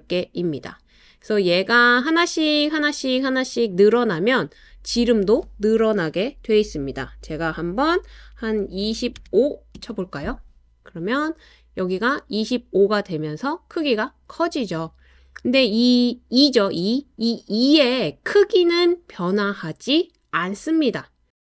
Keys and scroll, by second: 8.9 typing, 9.8 Return, 11.1 typing.